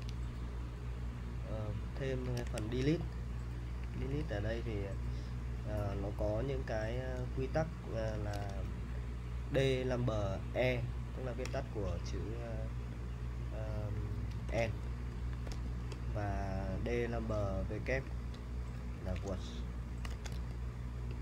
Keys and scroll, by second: 2.4 super+Tab, 3.3-8.3 typing, 8.3 super+Tab, 13.9-16.0 typing, 18.1-20.8 typing.